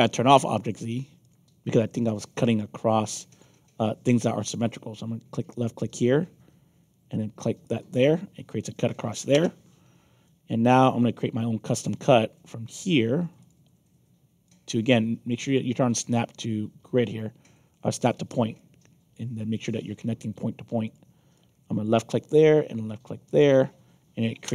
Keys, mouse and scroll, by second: 0.3 click, 1.2 click, 2.1 middle click, 2.5 alt+click, 5.5 click, 7.6 click, 9.3 Return, 10.2-11.8 alt+drag, 13.3 click, 14.4-15.5 alt+drag, 16.0 alt+click, 16.8 ctrl+z, 18.0 click, 18.5 alt+click, 20.8 click, 21.3 alt+click, 23.2 click, 24.4 Return.